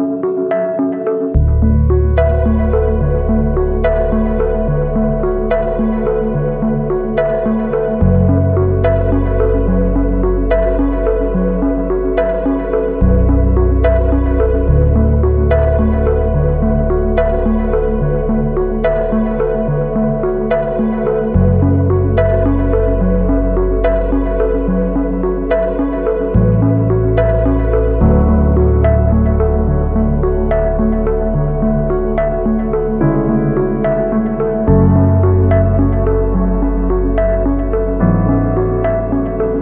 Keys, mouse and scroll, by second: 4.5 double click, 5.3-6.1 typing, 7.4 ctrl+t, 8.7 space, 10.3 alt+shift+click, 12.1 alt+shift+click, 14.3 Return, 14.6 Right, 19.4-20.9 typing, 21.1 ctrl+t, 22.8 alt+shift+click, 25.1 alt+shift+click, 26.2 Return.